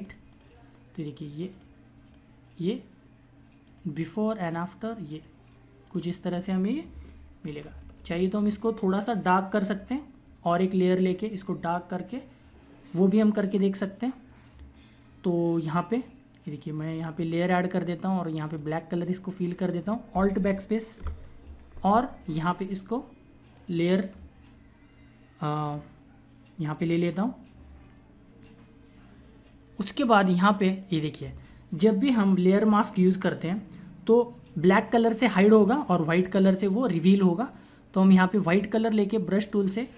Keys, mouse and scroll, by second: 7.7 ctrl+=, 16.7 click, 23.4 click, 29.8 click, 38.2 click.